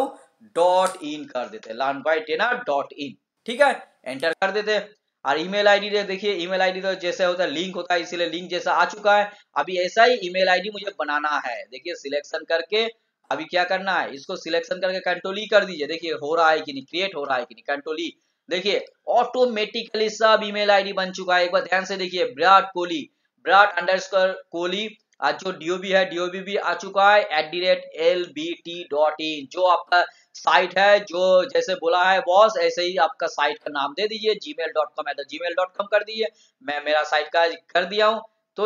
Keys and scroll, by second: 17.1 ctrl+e.